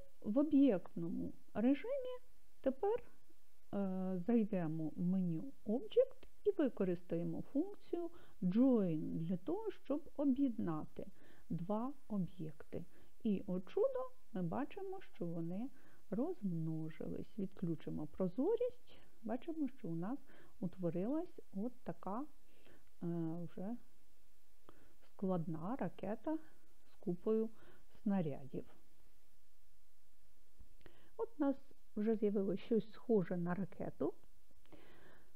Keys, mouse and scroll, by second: 4.6-8.8 drag, 8.8-11.2 right drag, 15.1 right click, 16.7 click, 18.9-19.4 scroll up 4, 20.0-21.1 scroll down 3, 21.1-22.1 scroll up 1, 22.1 scroll down 1, 22.2-26.8 middle drag.